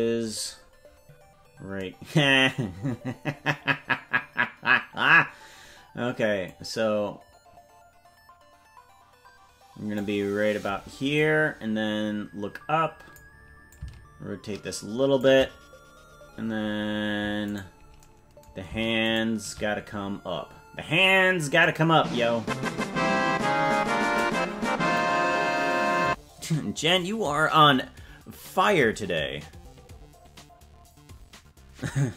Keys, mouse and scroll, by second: 0.2-0.7 scroll down 4, 1.3-1.6 scroll down 1, 6.4-10.0 drag, 11.1-13.2 drag, 13.7-15.2 shift+drag, 17.5 right click, 19.1 shift+right click, 21.6-24.2 drag.